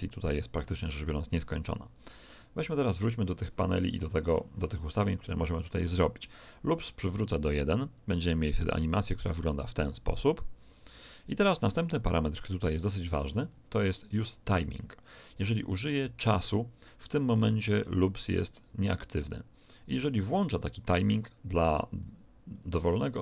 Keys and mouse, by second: 1.9 right click, 6.6-10.2 drag, 12.0-18.6 middle drag, 18.6 click, 22.4-23.2 drag.